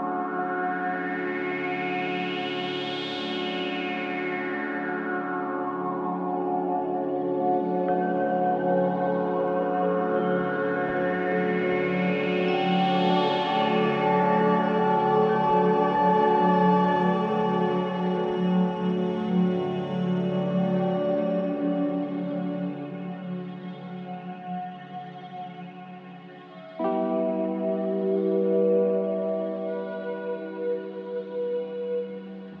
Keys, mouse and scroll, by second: 0.0-30.8 drag, 30.8-31.4 scroll up 6, 31.4-32.6 shift+middle drag.